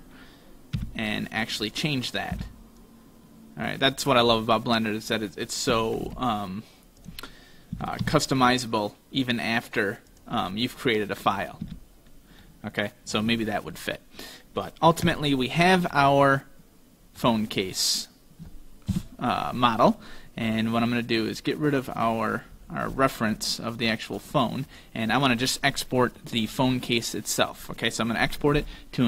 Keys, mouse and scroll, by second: 0.8 b, 2.3 b, 5.8 s, 7.8 s, 10.6 middle click, 11.7 z, 12.5 middle click, 15.1 Tab, 16.0 middle click, 17.6 right click, 19.0 KP_5, 20.8 click, 22.2-23.8 scroll down 7, 23.8 click, 23.8 scroll down 2, 24.8 right click, 26.3 middle click, 26.7 scroll up 3, 27.1-27.8 scroll down 2.